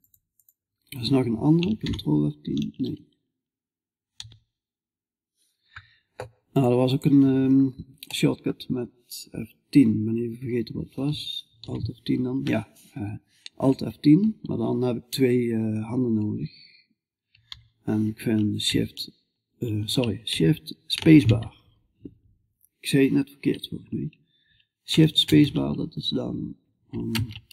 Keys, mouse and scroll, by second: 6.4 F11, 6.4-7.6 drag, 7.6 middle click, 11.1 alt+F1, 16.9 alt+F10, 20.4 shift+space, 24.7 shift+space.